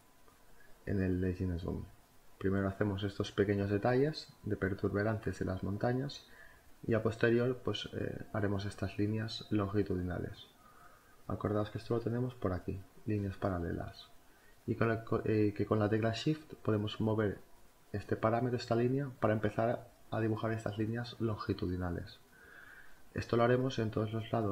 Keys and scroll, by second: 0.3-5.8 typing, 7.4 space, 9.9 b, 12.5 space, 14.3 [, 23.8 z.